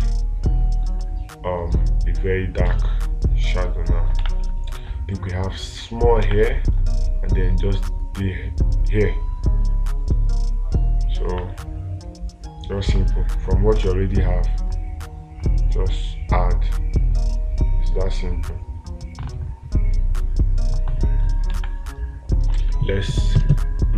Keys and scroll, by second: 3.1 space, 6.7 space, 13.4 space, 22.0 space.